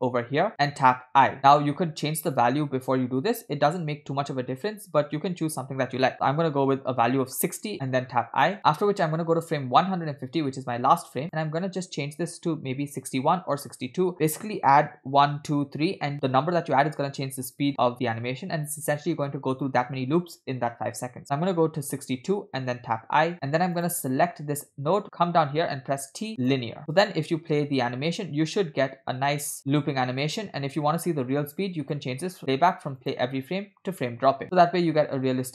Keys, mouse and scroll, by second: 1.5 i, 2.3-5.6 drag, 7.8 i, 9.2 click, 11.2-22.0 drag, 23.2 i, 23.9 click, 25.9 t, 27.2 click, 27.8 space, 31.9 click.